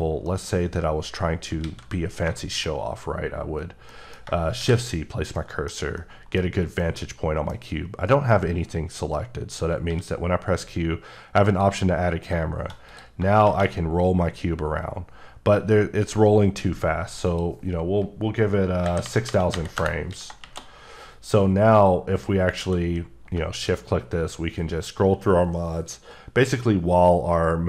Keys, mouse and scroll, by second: 0.3 middle click, 1.6 a, 2.1 scroll down 2, 2.4 middle click, 3.9 middle click, 4.6 c, 5.0-5.4 scroll down 2, 5.4 middle click, 5.7 scroll down 1, 6.0 middle click, 6.4 scroll up 2, 6.8 middle click, 7.4-7.8 scroll down 1, 9.9 q, 11.4 click, 12.9 click, 17.3 click, 18.8 KP_0, 19.3 KP_0, 19.8 KP_Enter, 21.5-22.5 scroll up 4, 22.6 q, 23.5 click, 24.2 scroll up 1, 24.8 scroll up 1, 25.3-27.1 scroll up 5.